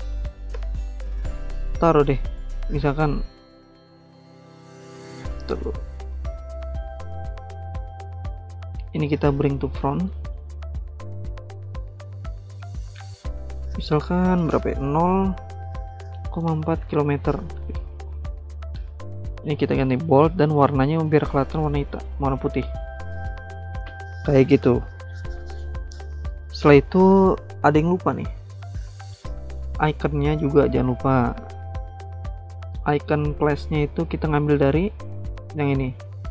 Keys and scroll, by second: 0.3 ctrl+c, 0.5 ctrl+v, 4.7 ctrl+z, 5.1 ctrl+z, 5.5 ctrl+z, 6.0 ctrl+z, 14.9-17.3 typing, 19.0-21.4 typing, 22.5-23.8 typing.